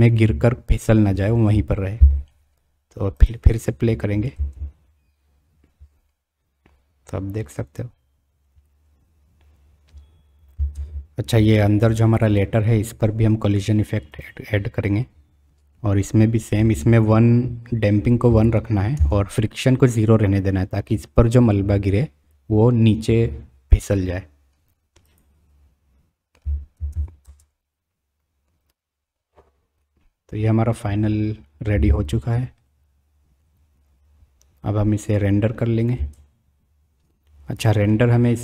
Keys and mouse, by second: 4.3 space, 11.0 space, 12.1 click, 14.5-19.3 drag, 25.0 click, 26.9 alt+a, 27.2 space, 36.6 space, 37.6-37.9 drag.